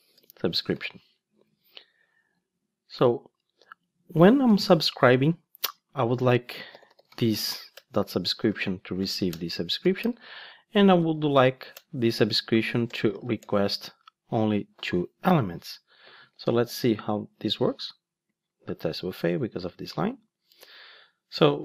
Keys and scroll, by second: 7.7 Return, 16.6 ctrl+shift+d, 19.5 super+x.